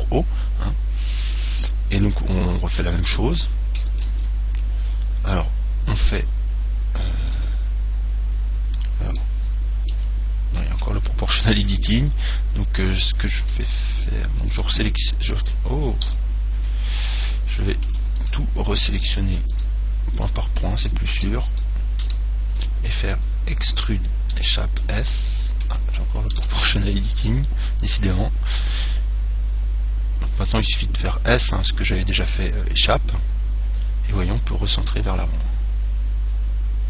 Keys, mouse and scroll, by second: 4.3 ctrl+z, 7.6 o, 9.3 right click, 10.2 g, 14.2 right click, 16.3 a, 18.4-23.5 right drag, 24.1 e, 25.1 s, 26.6 o, 30.9 s, 34.8 click, 35.2-36.8 middle drag.